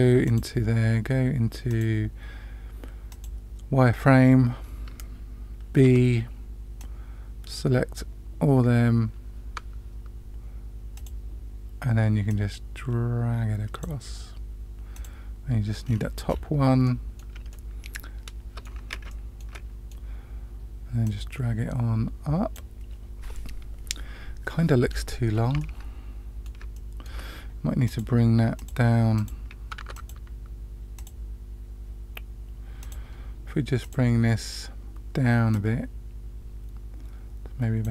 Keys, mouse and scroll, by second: 0.2 click, 1.7 click, 3.1 click, 5.8 b, 10.9 click, 12.2-13.8 drag, 14.9 click, 15.9-16.7 scroll down 4, 16.8 middle click, 17.5-18.6 middle drag, 19.0 shift+middle click, 19.5 middle click, 21.0-22.5 drag, 24.8-25.5 scroll down 2, 25.5-26.5 middle drag, 26.7-27.0 shift+middle drag, 27.8 click, 28.5 click, 29.1 click, 29.7 Tab, 29.9 click, 30.9 click, 32.8 click, 33.8 click, 35.5-37.8 drag.